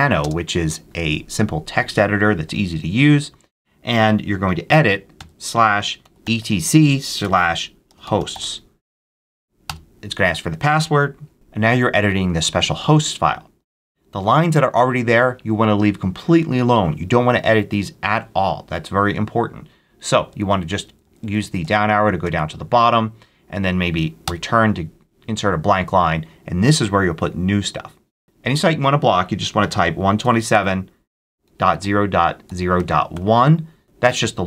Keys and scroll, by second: 0.1 space, 5.1-8.8 typing, 9.5 Return, 19.7 Down, 24.1 Return, 29.1-33.5 typing.